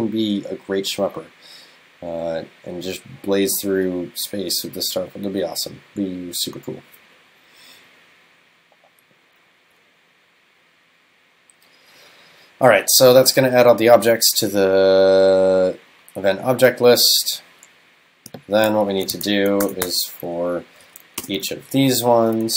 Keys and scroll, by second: 19.2 shift+super+Left, 20.9 super+Right.